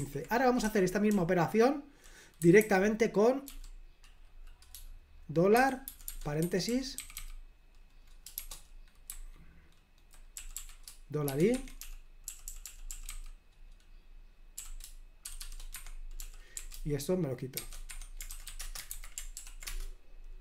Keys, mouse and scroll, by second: 0.0 super+l, 0.7-3.5 typing, 5.6-7.2 typing, 8.4-19.2 typing, 15.8 Escape, 19.4 ctrl+p, 19.8 Return.